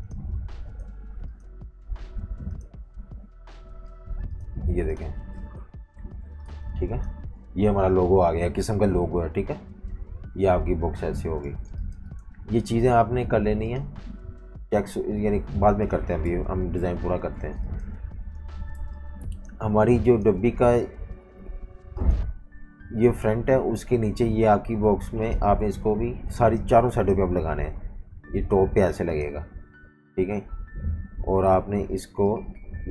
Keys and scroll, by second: 4.6 typing, 5.5 super+-, 5.7 super+-, 5.9 super+-, 6.5-7.9 typing, 11.5 v, 11.7 space, 16.3 super+-, 16.4 super+-, 17.4 typing, 18.5-20.2 typing, 25.0 super+3, 25.4 super+3.